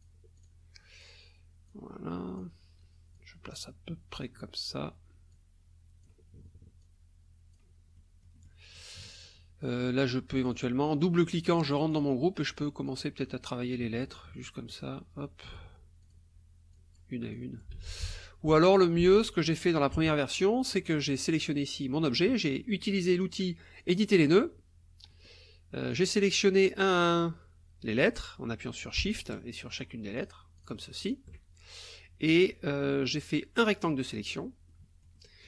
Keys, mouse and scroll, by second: 0.4 click, 1.7 click, 3.1-4.4 drag, 5.3 click, 6.8 click, 8.0 click, 8.7 click, 9.8 click, 10.5 click, 11.5 click, 12.8 click, 14.5-15.7 drag, 16.0 click, 16.7 click, 17.3 click, 17.8 ctrl+z, 19.5 ctrl+click, 20.0 ctrl+KP_Subtract, 21.1 click, 23.8 click, 25.1 click, 25.9 click, 29.1 shift+click, 29.7 shift+click, 30.2 shift+click, 30.6 shift+click, 31.0 shift+click, 33.3-34.5 drag, 34.7 click.